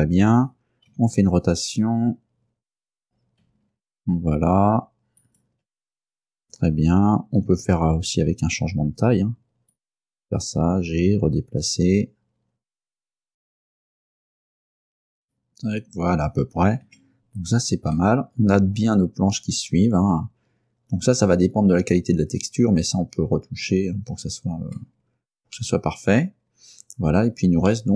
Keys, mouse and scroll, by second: 1.0 r, 5.3 ctrl+click, 7.5 s, 9.8 click, 10.2 middle click, 10.8 g, 13.5-15.1 typing, 13.5 click, 13.6 shift+right click, 14.2 click, 14.2 right click, 14.3 shift+right click, 15.3 click, 16.9 Tab, 18.1-21.6 middle drag, 21.8-22.2 scroll up 1, 22.5-23.0 scroll down 4, 23.8 scroll down 1, 24.9 middle click, 25.9-27.9 middle drag.